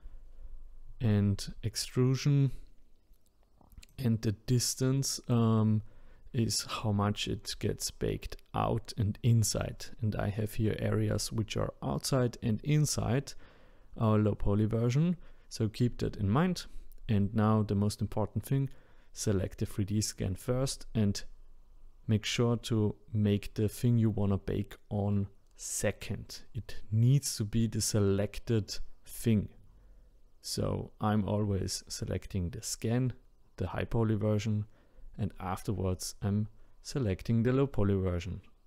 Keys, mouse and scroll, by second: 15.6 click, 19.7 ctrl+click, 23.9 click, 34.2 click, 35.2 shift+click.